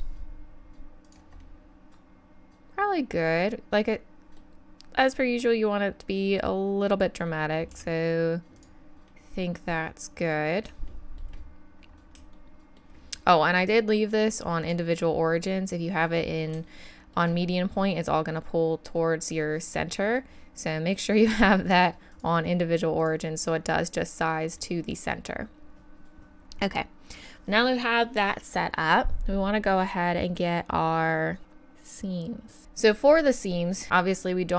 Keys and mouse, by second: 1.4 middle click, 1.7 middle click, 1.9 middle click, 2.1 middle click, 2.3 middle click, 2.5 middle click, 5.4-7.7 middle drag, 7.7 s, 9.1-10.6 middle drag, 16.7 middle click, 22.1-24.6 drag, 32.6 KP_1.